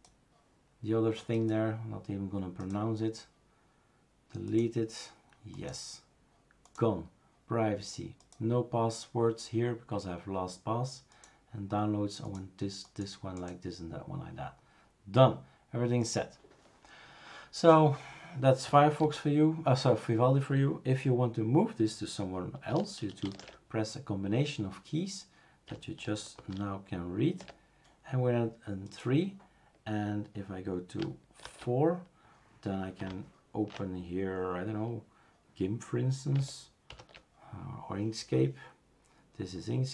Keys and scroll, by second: 19.1 super+f, 23.4 shift+super+2, 26.4 shift+super+3, 31.6 super+', 36.9 super+F3.